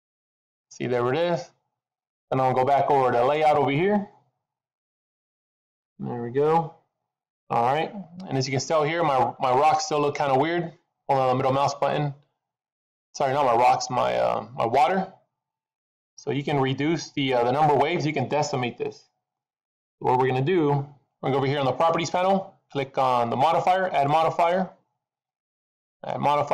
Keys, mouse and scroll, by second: 4.8 click, 8.5 scroll down 3, 8.8 middle click, 14.6 middle click, 16.8 middle click, 23.8 click, 25.5 click.